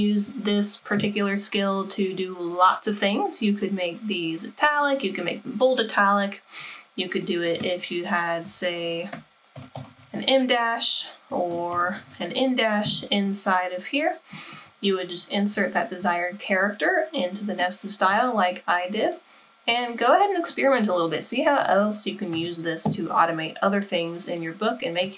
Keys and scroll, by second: 8.2 BackSpace, 8.5 BackSpace, 9.6 alt+0, 9.8 alt+1, 9.9 alt+5, 10.0 alt+1, 11.5 alt+0, 11.7 alt+1, 11.8 alt+5, 15.4 alt+0, 21.4 BackSpace, 21.6 BackSpace.